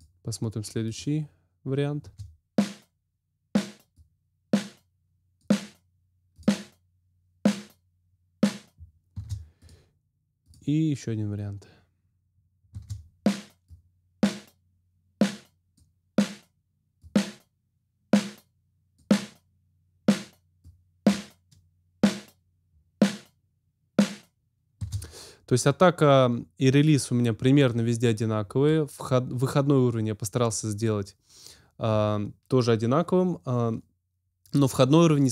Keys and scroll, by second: 2.0 space, 9.1 space, 12.6 space, 24.8 space.